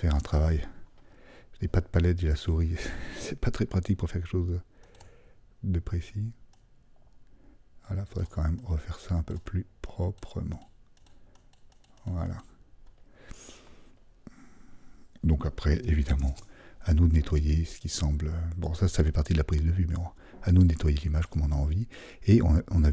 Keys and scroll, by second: 16.2 alt+super+0.